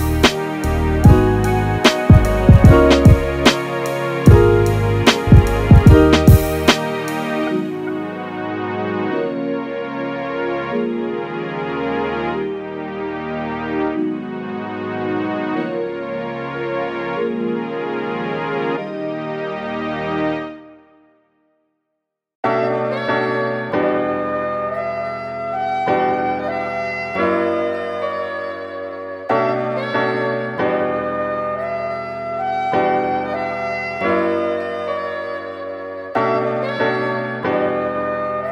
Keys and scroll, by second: 33.8 super+z.